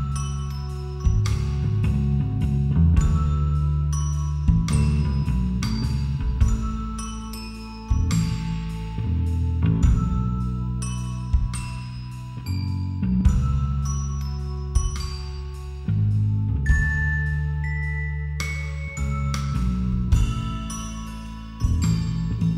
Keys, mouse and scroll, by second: 0.3 a, 1.8-2.9 right drag, 2.3 ctrl+r, 6.3 a, 7.1 b, 8.4 g, 11.2-13.7 middle drag, 13.1 b, 15.1 a, 15.8 b, 17.3 g, 19.0 a, 20.5 z, 21.1 z.